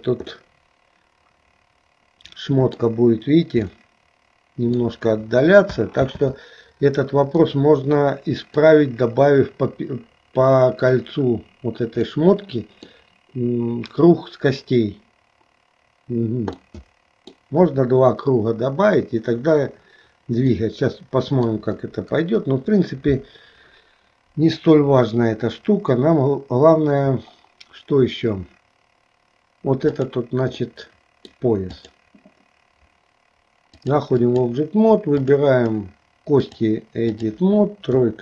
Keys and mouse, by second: 0.5-3.0 middle drag, 3.9-5.0 middle drag, 6.2 ctrl+z, 7.5-8.7 middle drag, 12.1 middle click, 16.6 middle click, 20.6-21.7 middle drag, 22.2 KP_1, 30.0 click, 30.7 middle click, 31.9 click, 33.8 click, 35.3 click, 36.4-37.5 drag, 38.1 KP_3.